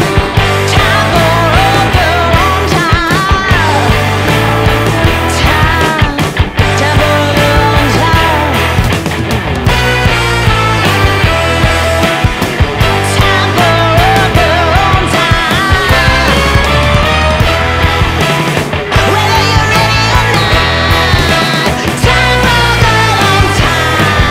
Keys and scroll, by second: 6.5 space, 8.3 shift+F2, 18.9 ctrl+Page_Down, 23.3 ctrl+Page_Down.